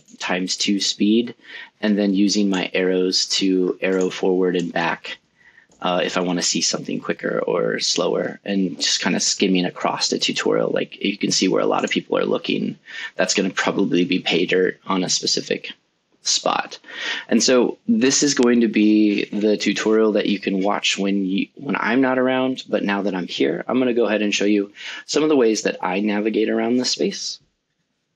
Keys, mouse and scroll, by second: 0.4 middle click, 2.3 middle click, 4.4 middle click, 5.3 click, 6.1 middle click, 12.5 click, 13.1 click, 13.6 click, 22.0 click, 23.9 scroll up 6, 24.1 scroll down 6, 24.4 scroll up 4, 24.6 scroll down 2, 24.7 scroll up 3.